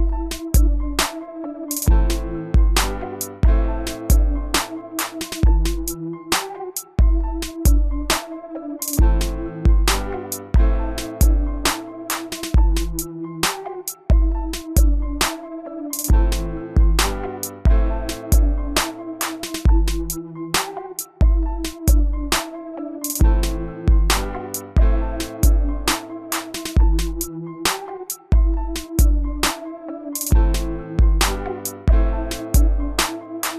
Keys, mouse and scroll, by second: 4.7 s, 5.7 click, 10.0 s, 11.7 click, 16.7-17.1 typing, 17.5 Return, 18.5 click, 23.8-24.5 typing, 24.8 Return, 25.6 click, 26.4 right click, 27.2 click, 31.4 typing, 32.6 click.